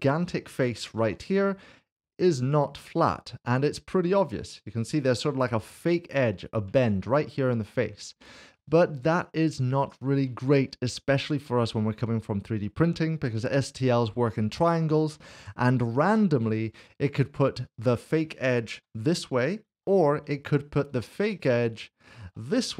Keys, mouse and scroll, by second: 1.0 3, 1.3 click, 2.9 middle click, 7.6 middle click, 9.2 shift+middle click, 16.5 1, 16.9 click, 17.7 shift+click, 19.7 typing, 20.9 click, 22.0 shift+click.